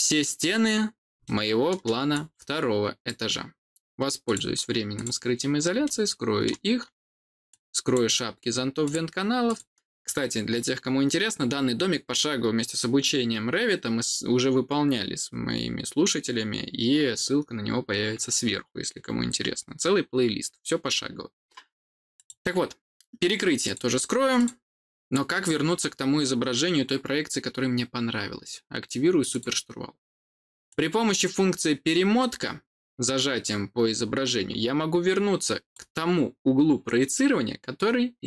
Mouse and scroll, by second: 1.1 middle click, 2.0 click, 4.2 click, 4.9 click, 5.7 middle click, 7.4 click, 8.7 click, 9.4 click, 22.1 click, 23.6 click, 24.3 click, 29.2 click, 30.6-35.6 drag.